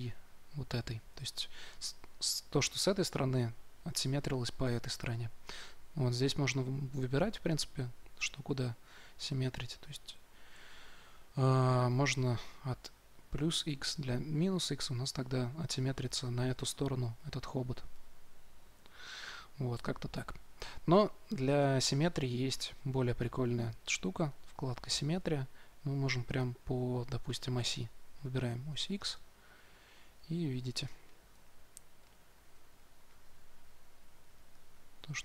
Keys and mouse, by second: 10.6 ctrl+z, 11.8-13.8 drag, 17.8-19.8 drag, 23.1-30.8 drag, 31.2 f, 32.3-34.2 drag, 34.4-35.2 drag.